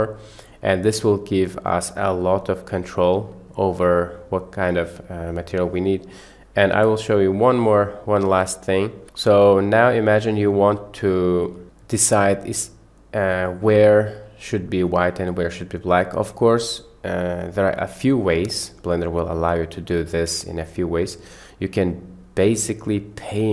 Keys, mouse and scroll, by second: 1.1-1.8 drag, 6.8 Delete, 7.4 click, 8.5 click, 9.0 Delete, 10.5-11.3 middle drag, 11.6-12.2 middle drag, 14.2-14.9 middle drag, 15.5 middle click, 20.1 middle click.